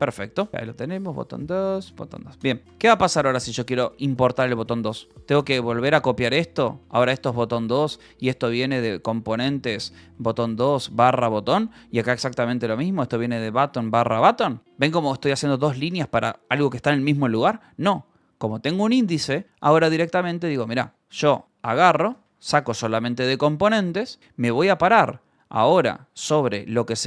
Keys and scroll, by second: 0.0-1.3 typing, 0.8 Return, 2.4 ctrl+s, 3.7 Escape, 4.9-9.4 typing, 10.1 Return, 10.5 /, 11.1 Return, 11.3 Escape, 11.6-15.3 typing, 13.0 Return, 14.0 Return, 14.3 Escape, 17.4 j, 18.8-22.0 typing, 22.2 Escape.